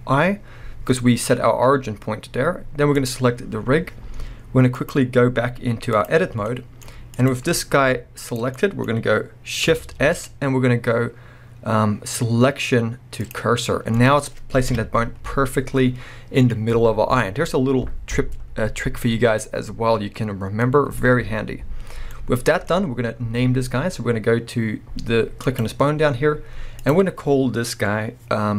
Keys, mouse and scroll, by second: 1.0 scroll down 1, 1.1-1.8 scroll up 2, 1.8-2.6 scroll down 2, 2.6-2.9 scroll down 1, 2.9 click, 4.8-6.5 drag, 6.5-7.1 middle drag, 7.1 click, 7.8 g, 8.4 right click, 8.6-25.5 middle drag, 10.0 shift+s, 14.7 KP_3, 15.2 scroll up 1, 16.0 scroll down 1, 20.6 scroll up 2, 25.5 click, 25.6-26.8 middle drag, 26.8-28.5 drag.